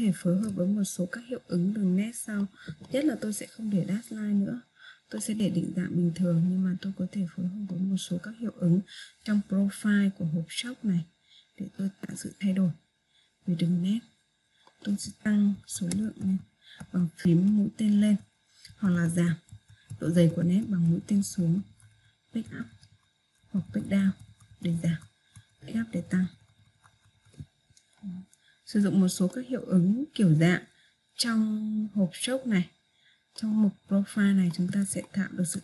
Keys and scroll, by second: 17.3 Page_Up, 19.9 Page_Down.